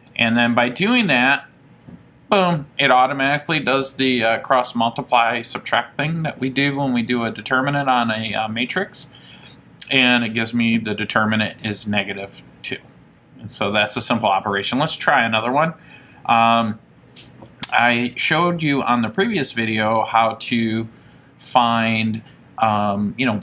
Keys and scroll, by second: 0.1 ), 1.5 Return, 20.0 Right.